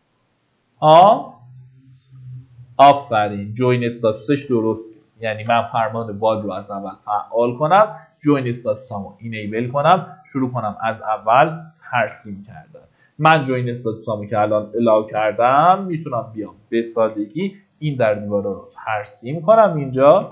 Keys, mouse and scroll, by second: 1.3-2.0 scroll down 1, 2.8 middle click, 3.4 click, 4.7 Delete, 5.5 typing, 8.0 click, 12.1 KP_1, 13.2 KP_0, 15.3 KP_6, 17.4 KP_4.